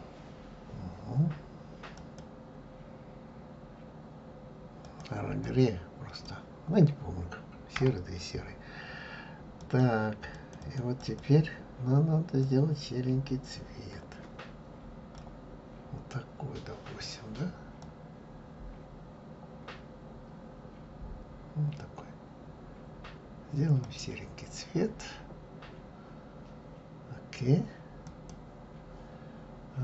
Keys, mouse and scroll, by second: 10.6 click, 12.5 click, 28.2 click.